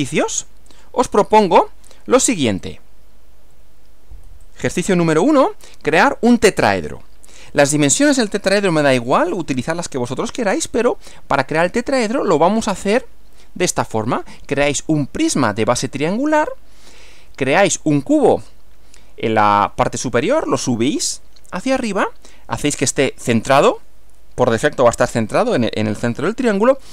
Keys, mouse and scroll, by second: 0.7 click, 2.6 click, 3.5 Right, 4.4 click, 4.8 Right, 11.9 Right.